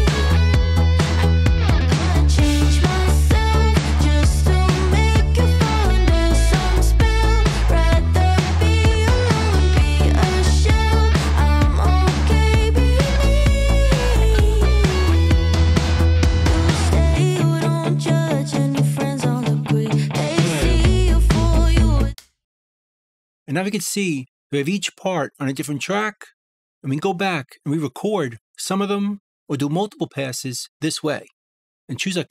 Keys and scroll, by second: 16.9 a.